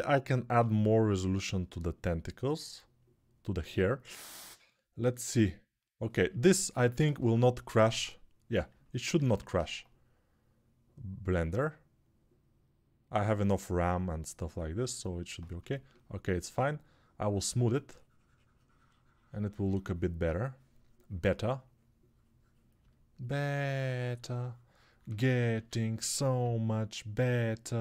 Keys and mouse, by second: 0.1 shift+r, 25.3 1, 26.2-27.0 [.